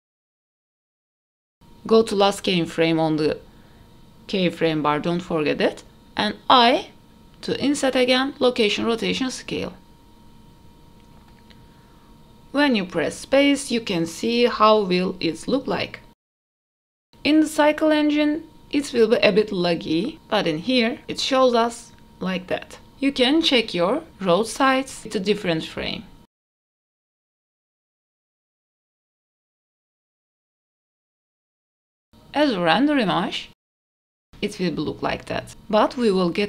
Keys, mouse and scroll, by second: 3.4 i, 6.0 click, 7.0 KP_0, 9.2 KP_0, 10.1 space, 13.2-14.2 scroll up 2, 14.2 space, 15.5 click, 16.9 space, 18.3 space, 19.6 click, 20.0 space, 23.2 click, 24.5 click, 27.2 click, 27.7-29.3 drag, 30.2-33.0 drag.